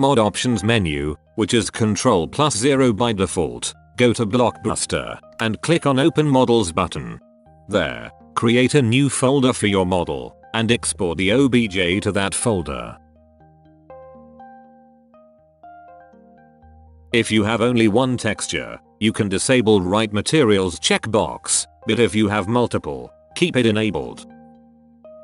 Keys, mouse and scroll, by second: 13.7-14.7 middle drag, 15.3-18.9 drag.